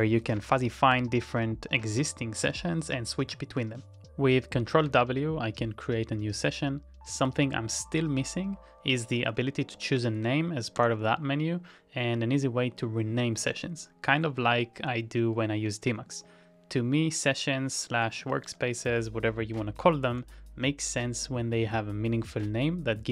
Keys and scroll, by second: 0.0-1.7 typing, 7.2 Return, 9.8 ctrl+x, 10.8 d, 11.5 BackSpace, 13.5 Return, 18.3 ctrl+x, 20.1 w.